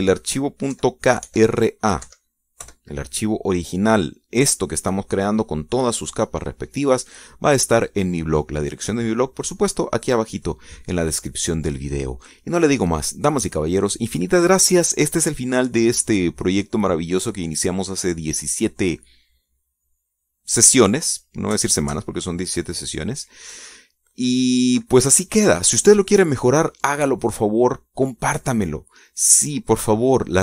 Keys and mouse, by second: 1.4 click, 2.4 Left, 2.9 BackSpace, 3.7 KP_7, 4.3 KP_Enter, 5.8 click, 13.0 click, 26.9 click.